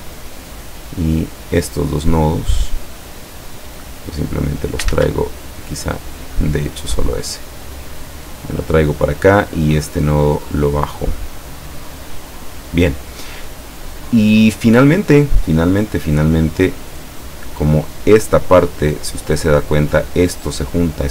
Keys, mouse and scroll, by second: 1.7 click, 3.6-5.0 drag, 5.0 ctrl+z, 6.0 click, 6.7-8.9 drag, 9.3-10.7 drag, 11.2-12.9 drag.